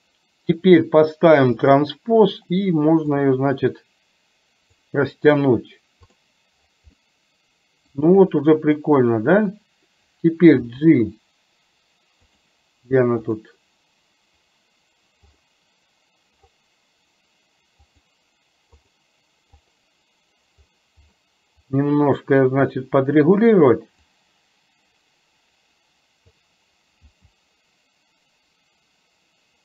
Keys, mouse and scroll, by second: 1.7 click, 3.2-4.9 drag, 6.3 drag, 7.2-8.0 middle drag, 10.8 g, 12.4 click, 13.3 click, 17.9 click, 18.9 click, 24.0 click, 24.4-26.4 drag, 27.2 g.